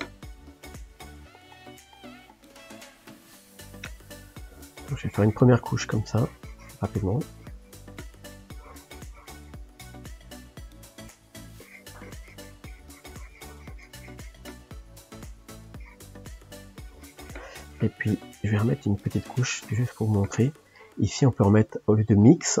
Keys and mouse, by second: 1.7-2.9 middle drag, 2.9 click, 3.2-4.7 middle drag, 4.7 click, 5.6 shift+middle click, 6.2-8.1 drag, 8.1 middle click, 8.6-9.9 drag, 9.9 f, 11.6-14.6 drag, 14.6-15.7 middle drag, 15.7 click, 16.2 shift+middle click, 16.8-18.4 drag, 18.4 middle click, 18.9-22.6 drag.